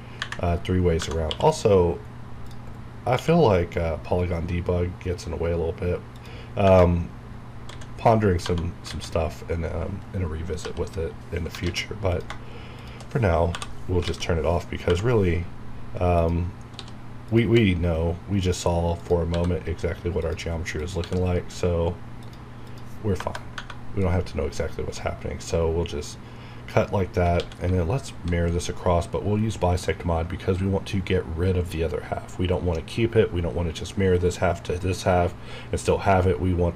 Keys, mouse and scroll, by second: 0.8 scroll down 1, 1.0 Tab, 1.2 q, 2.4 click, 3.1 q, 6.1 click, 6.6 Tab, 6.9 scroll up 1, 7.7-9.3 typing, 10.5 l, 11.6 alt+a, 12.1 click, 14.0 alt+a, 16.1 click, 16.7 c, 17.2 click, 17.4 e, 18.3 click, 19.2 e, 20.1 click, 21.0 e, 22.1 click, 23.1 KP_Enter, 23.5 Tab, 23.9 scroll down 1, 24.3 scroll up 1, 24.7 scroll down 1, 27.3 alt+x.